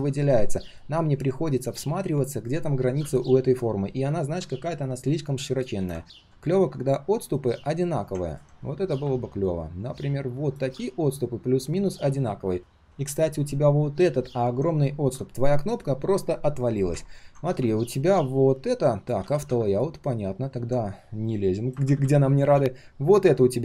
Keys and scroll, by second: 0.6 ctrl+shift+4, 1.4 ctrl+shift+4, 12.2 ctrl+shift+4, 12.9 ctrl+shift+4, 19.2 ctrl+z.